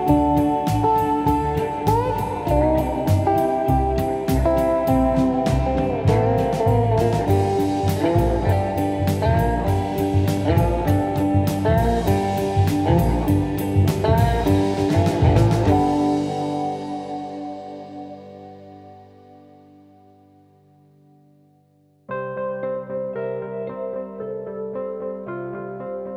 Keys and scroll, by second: 6.0 F1, 8.9 F1, 9.3 F2, 15.8 ctrl+d, 15.9 Escape, 16.3 F2, 20.5 F1, 21.8 F1, 21.9 F2, 25.4 F1, 25.6 F2.